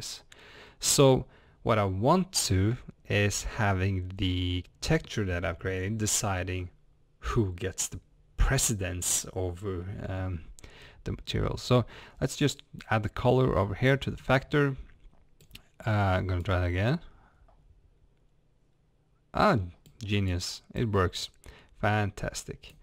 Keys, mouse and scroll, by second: 16.5-17.3 drag, 21.1-22.8 drag.